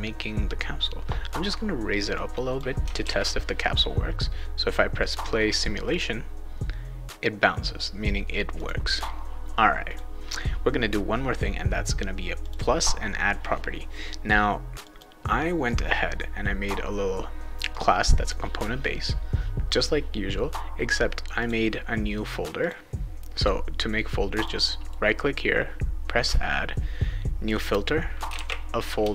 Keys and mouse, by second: 2.1 click, 3.0 ctrl+s, 5.9 click, 8.5 click, 9.9 click, 12.4 click, 14.8 click, 17.7 click, 21.4 click, 22.6 click, 24.3 click, 24.8 right click, 27.5 click, 28.0-28.8 typing, 29.0 Return.